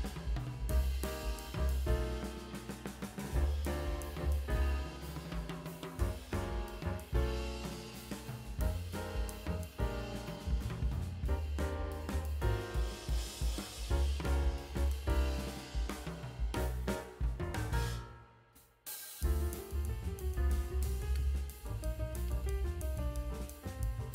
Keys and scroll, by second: 4.0 space, 6.2 ], 14.4 space, 15.6 space, 15.9 [.